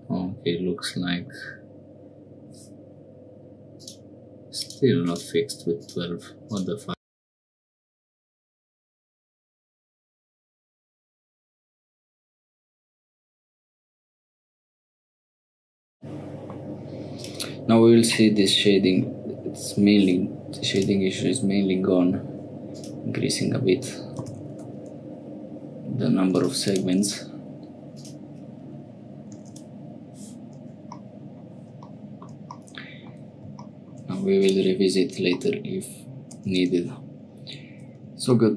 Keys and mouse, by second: 4.6 click, 5.1 click, 5.8-8.4 drag, 8.6 middle click, 8.8 Tab, 9.1 shift+n, 9.4 middle click, 10.2 click, 10.5 shift+click, 10.9 click, 11.4-12.8 drag, 13.0 middle click, 13.3-14.7 drag, 15.0 click, 15.7 middle click, 17.1 click, 18.2 middle click, 20.7 click, 22.7-25.1 drag, 26.3 click, 26.6 click, 27.9-30.2 drag, 31.0 middle click, 32.5 middle click, 34.4 click, 35.4 click, 36.5 Tab.